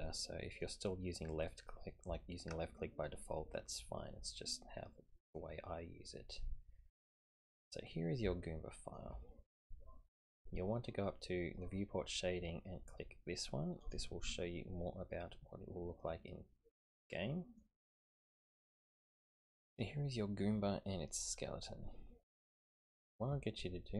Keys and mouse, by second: 5.1-7.5 middle drag, 8.3-9.0 shift+middle drag, 14.2 click, 16.1-17.6 middle drag, 18.7-20.4 middle drag, 21.2 click.